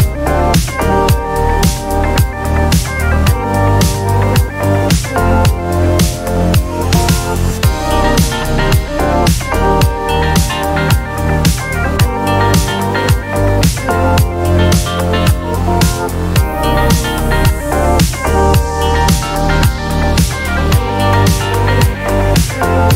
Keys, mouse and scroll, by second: 0.1 ctrl+d, 1.0 shift+click, 2.4 ctrl+KP_Multiply, 4.6 click, 5.4 shift+click, 6.8 click, 7.4 click, 8.0 click, 10.0 click, 10.8 click, 11.6-13.3 drag, 14.5 click, 16.3 ctrl+middle click, 16.3-17.0 ctrl+scroll, 16.4 ctrl+click, 16.4 ctrl+middle click, 16.6 click, 16.8 middle click, 17.0 click, 17.6 ctrl+d, 18.6-20.1 ctrl+shift+drag, 18.6 typing, 20.4 ctrl+shift+click, 21.7 click.